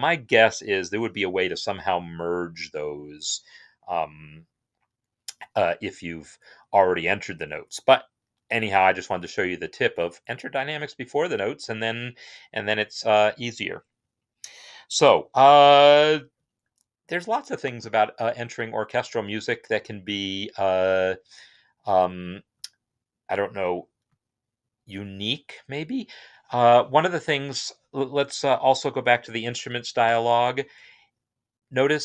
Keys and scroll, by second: 29.8 i.